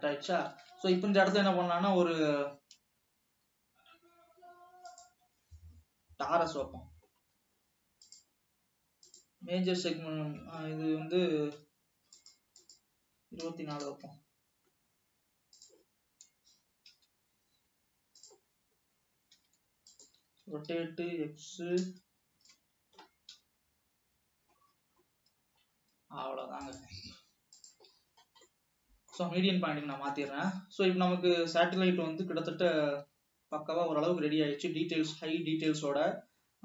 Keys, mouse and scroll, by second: 0.8 scroll down 2, 3.2 alt+a, 8.1-12.1 drag, 12.8-16.6 drag, 16.6 scroll down 2, 17.1 s, 18.6-19.0 scroll up 3, 19.5 s, 20.5 r, 23.4 KP_1, 24.7-26.1 scroll up 7, 26.9-28.2 drag, 28.2-28.6 scroll down 4, 28.7-29.6 middle drag, 29.6-30.2 scroll down 5, 30.3 alt+a, 30.5-33.1 middle drag, 33.1 alt+h, 33.2 scroll up 1, 33.5 alt+a, 33.6 scroll down 1, 33.7-36.2 middle drag.